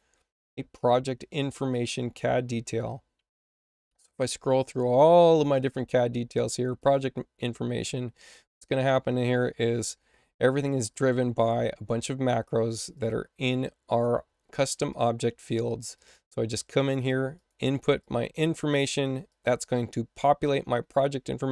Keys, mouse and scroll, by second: 1.6 click, 3.3-4.0 scroll down 2, 6.7 click, 6.9 click, 10.0 space, 10.6 click, 10.8 click, 12.9 click, 13.8 click, 14.8 click, 15.9 click, 17.3 click, 17.9 click, 19.2 click.